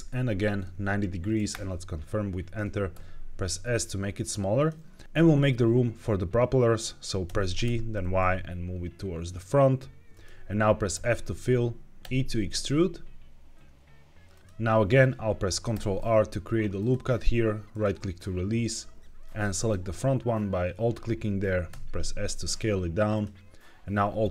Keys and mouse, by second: 0.5 KP_9, 0.5 KP_0, 1.4 KP_Enter, 2.8 s, 4.5 click, 4.9 middle click, 7.1 g, 7.5 y, 10.0 click, 10.8 f, 11.9 e, 14.2 click, 15.6 ctrl+r, 17.6-18.6 drag, 19.5 alt+click, 21.6 s, 23.0 click, 24.2 alt+click.